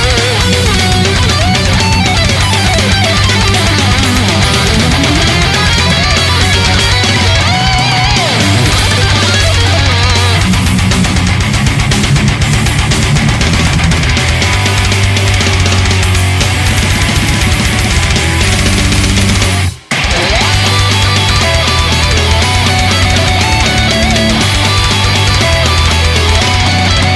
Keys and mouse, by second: 9.9 right click, 13.8 right click, 18.7 ctrl+z, 20.4 ctrl+z.